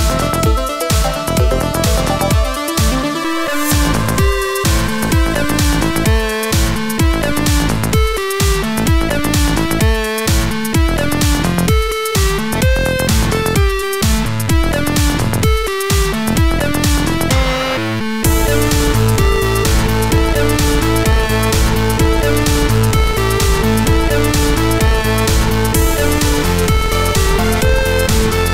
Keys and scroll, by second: 4.8 ctrl+0.